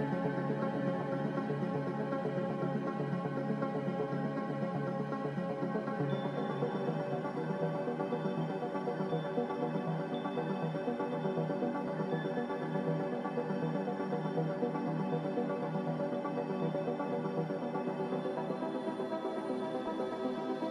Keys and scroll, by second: 3.6 ctrl+c, 3.9 ctrl+r.